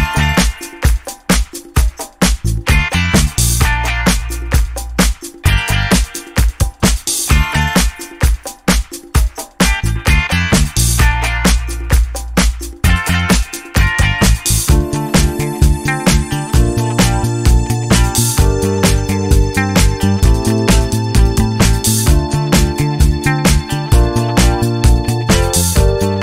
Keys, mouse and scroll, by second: 1.2-1.8 ctrl+scroll up 2, 3.2-6.5 ctrl+drag, 7.6 ctrl+scroll down 2, 10.7-11.2 ctrl+scroll down 2, 13.4 ctrl+scroll down 2, 15.1-16.8 ctrl+middle drag, 20.1 middle click, 20.6 click, 21.2 middle click, 21.8 click, 22.1 middle click, 24.6 ctrl+scroll up 2, 25.8-26.2 ctrl+scroll up 2.